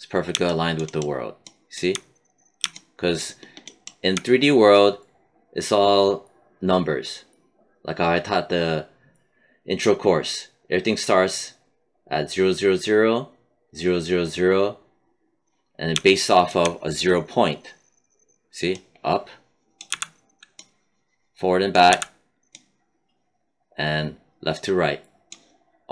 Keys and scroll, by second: 19.8 z, 21.8 z.